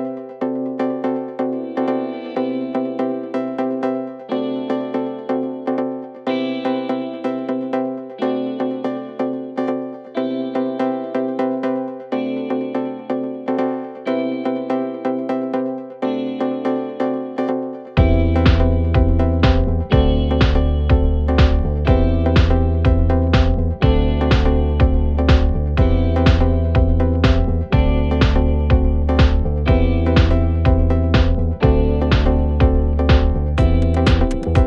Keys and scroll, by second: 1.8 3, 10.3 ctrl+z, 12.2 ctrl+z, 14.9 4, 18.2 3, 19.3 ], 20.9 4, 26.0 5, 28.1 5, 30.8 5.